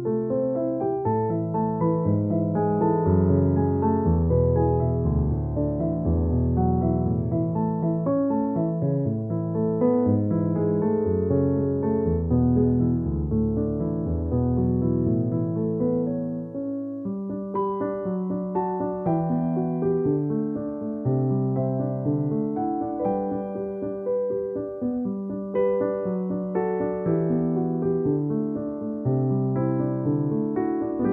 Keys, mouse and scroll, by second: 0.6-4.3 typing, 6.5-9.0 typing, 10.1 [, 13.3-14.9 typing, 14.7 click, 15.7 ctrl+-, 16.1-19.0 typing, 20.5-21.7 typing, 23.7-24.4 typing, 25.9-28.5 typing, 29.8-31.1 typing, 31.0 click.